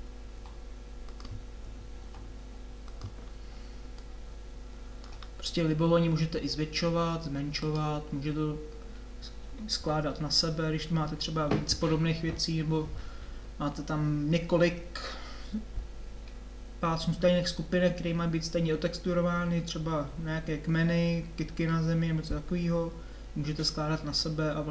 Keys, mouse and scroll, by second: 0.4 r, 2.1 g, 6.4 s, 9.8 g.